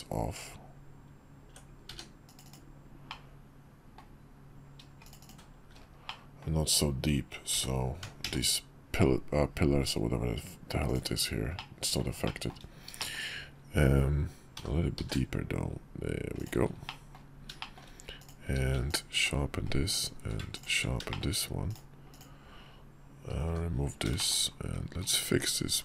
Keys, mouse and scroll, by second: 3.1-4.9 middle drag, 4.9 shift+click, 5.8-6.2 drag, 7.3 g, 11.3-11.7 middle drag, 12.1 shift+middle drag, 12.8 shift+middle click, 14.3 g, 16.7 middle click, 17.4 shift+middle click, 17.9 click, 18.2 q, 19.7 click, 19.9 q, 20.8 shift+middle click, 21.4 click, 21.8 click, 23.2 h, 23.9 shift+click, 24.8 click, 25.0 Tab.